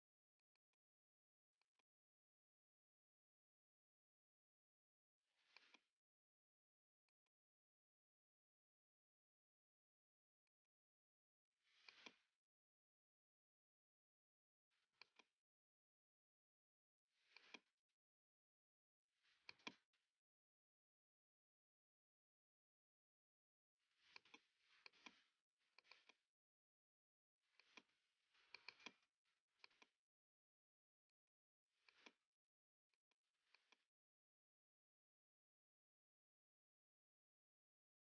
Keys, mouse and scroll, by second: 0.5 click, 0.6 click, 1.7 click, 2.5-3.8 typing, 3.9 Tab, 5.6 click, 7.2 alt+click, 7.7-9.2 typing, 10.6 click, 10.6 typing, 12.0 alt+click, 12.5-14.4 typing, 15.1 click, 15.5 space, 16.3 click, 16.7-17.0 scroll, 17.2 scroll, 17.4 click, 19.6 click, 19.9-21.7 typing, 24.9 click, 26.3 click, 27.7 click, 28.6 click, 30.0-30.7 typing, 31.2 click, 32.0 click, 32.3-33.1 typing, 33.0 click, 33.6 click, 35.4-37.6 typing.